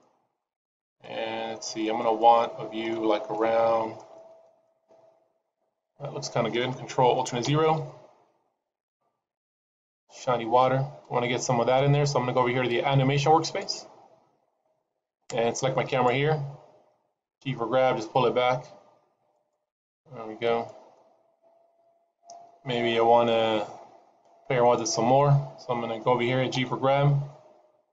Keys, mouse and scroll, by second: 0.5 middle click, 1.0 middle click, 1.7 middle click, 2.1 middle click, 3.3 shift+middle click, 4.1 shift+middle click, 7.5 ctrl+alt+KP_0, 8.8-10.5 scroll down 2.